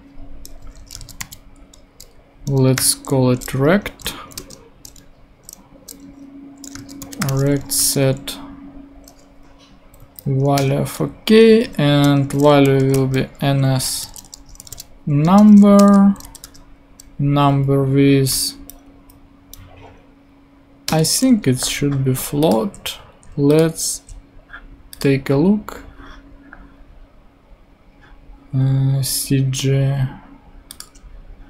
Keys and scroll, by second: 0.9 r, 2.8 t, 3.5 super+t, 3.8 super+Right, 4.3 super+Return, 4.9 Return, 6.0-8.0 typing, 10.0 Down, 10.5 Return, 12.2-16.2 typing, 15.2 Return, 17.8 Down, 20.8 Return, 21.9 super+Return.